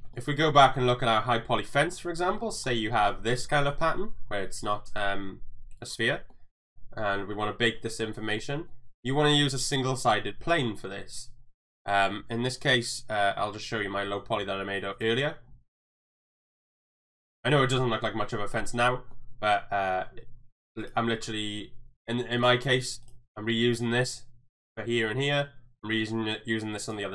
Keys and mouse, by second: 0.2 middle click, 0.2 n, 0.5 shift+middle click, 1.9-2.3 middle drag, 2.4 shift+middle drag, 6.4-7.1 middle drag, 8.4-8.7 middle drag, 9.3 shift+middle drag, 10.5 shift+middle click, 14.9 click, 15.7-16.0 middle drag, 16.1 shift+middle click, 17.0 click, 17.5 shift+middle click, 17.8 middle click, 18.9 middle click, 20.8 click, 25.3 click.